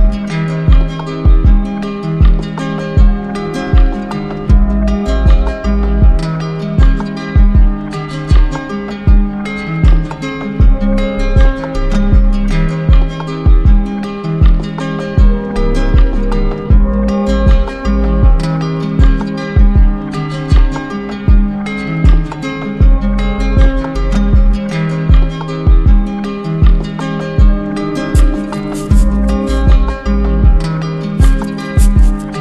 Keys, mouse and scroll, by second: 0.5-1.7 drag, 1.8-3.2 right drag, 3.2 click, 4.8 click, 5.5 click, 7.0 click, 7.7 click, 11.1 click, 13.8-14.9 drag, 16.1-17.8 drag, 18.2-19.2 drag, 20.0 click, 20.5 click, 20.9 alt+click, 21.4 alt+click, 21.4 q, 22.3 click, 22.8 click, 23.3 alt+click, 24.0 alt+click, 24.9 click, 25.9 ctrl+d, 26.1 ctrl+d, 27.1 ctrl+z, 27.3 ctrl+z, 28.4 click, 29.6 click, 30.4 click.